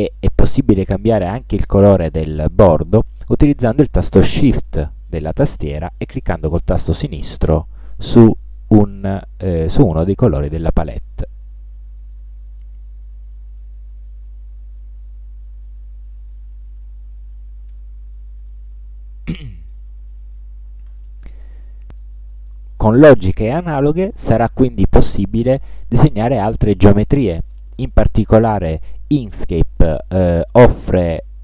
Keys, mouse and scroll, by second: 0.4 ctrl+scroll down 2, 7.4 shift+click, 9.9 shift+click, 11.0-11.3 ctrl+shift+scroll down 2, 11.7 ctrl+scroll down 2, 12.3 ctrl+middle click, 13.2 ctrl+scroll down 2, 17.9 Escape, 18.6-20.0 middle drag.